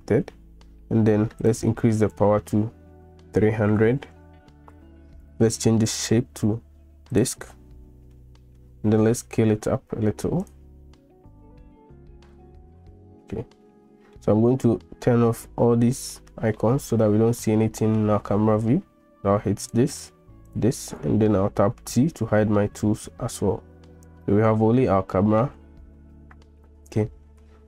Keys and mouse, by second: 1.5-5.1 drag, 3.7 0, 6.0-7.2 drag, 8.2-8.6 middle drag, 9.1 s, 12.3-14.2 middle drag, 16.6-18.0 middle drag, 19.7 click, 20.5 click, 21.8 t, 24.6 shift+click, 26.5 middle click.